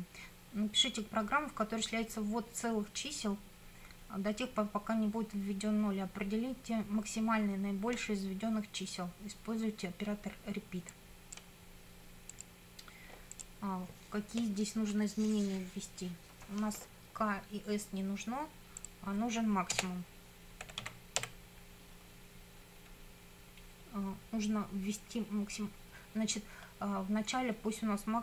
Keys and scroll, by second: 19.8 Return, 20.4-21.7 typing.